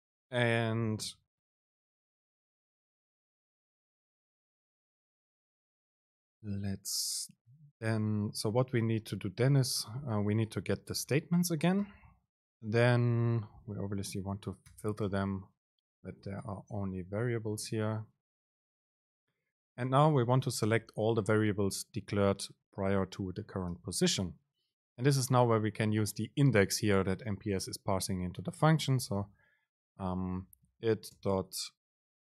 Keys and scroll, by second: 11.2 super+space, 19.2 Right, 20.1 super+space, 30.1 BackSpace, 31.3 super+space.